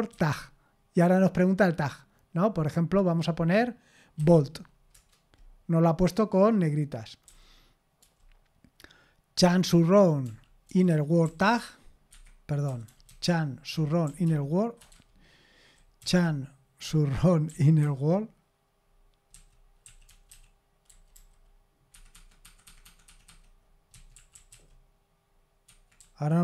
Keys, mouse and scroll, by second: 0.0-0.6 typing, 4.2 b, 4.9 Return, 7.2 j, 8.0 j, 9.4-17.8 typing, 12.1 Escape, 19.3-21.1 typing, 21.9 Escape, 22.3 Escape, 22.4 Escape, 22.6 Escape, 22.8 Escape, 23.1 Escape, 23.3 Escape, 23.7-26.0 typing, 25.7 Escape.